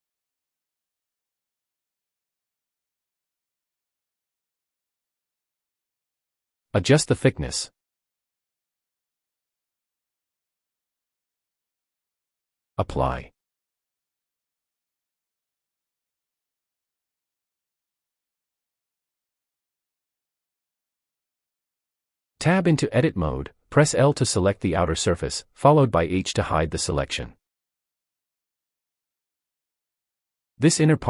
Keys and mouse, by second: 1.8-4.1 drag, 6.1 click, 7.8-10.3 drag, 13.0-13.9 drag, 16.8-17.8 drag, 21.1 Tab, 22.5 l, 23.5 l, 26.8 h, 28.1-31.0 middle drag.